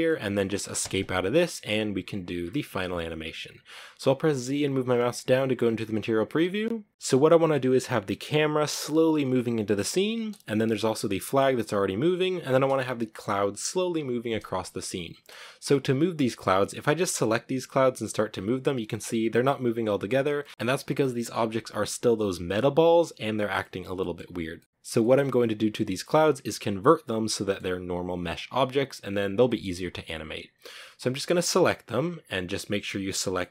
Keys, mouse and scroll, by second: 0.0 Escape, 1.7-4.2 shift+middle drag, 4.2 z, 5.0-5.9 scroll down 1, 6.9-8.6 scroll up 1, 8.8 scroll up 1, 9.3 space, 14.3 space, 16.3 right click, 16.8 g, 19.4 scroll down 2, 19.6-24.0 shift+middle drag, 24.0-24.3 scroll down 1, 24.3 scroll up 1, 24.3-30.6 middle drag, 30.6 right click, 31.1-32.1 right drag, 32.1 g, 32.6-33.5 middle drag.